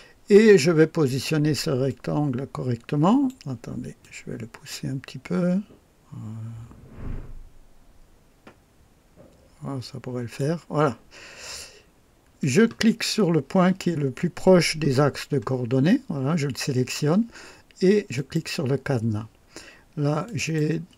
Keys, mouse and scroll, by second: 1.8 click, 4.0-10.5 drag, 12.4 click, 15.0-15.3 scroll down 2, 18.1 click, 20.2 click.